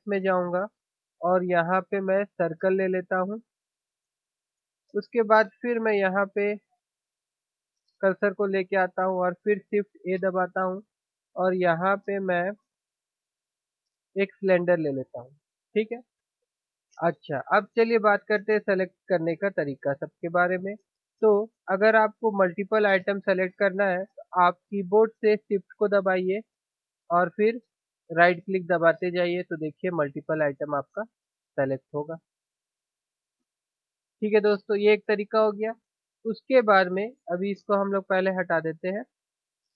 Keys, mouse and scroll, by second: 7.8-10.1 drag, 10.1 shift+a, 27.0-29.9 drag, 28.2 right click, 29.9-34.5 right drag, 34.5 click, 34.5 middle click, 39.3-39.7 right drag.